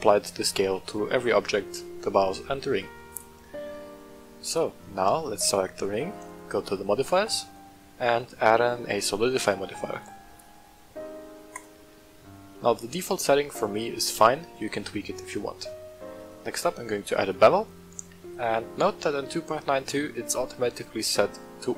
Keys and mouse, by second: 0.0 click, 3.1 right click, 4.4 right click, 6.2 click, 7.2-11.6 drag, 12.3 middle click, 12.8 shift+middle drag, 13.6 middle click, 16.1-17.4 drag, 18.4 click.